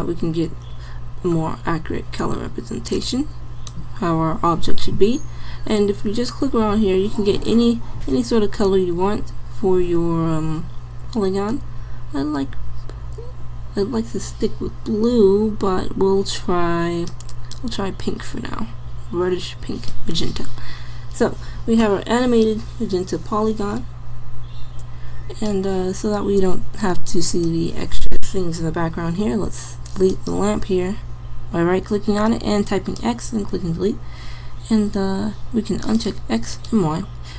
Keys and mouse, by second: 0.7-2.3 middle drag, 27.4-29.2 drag, 29.5 x.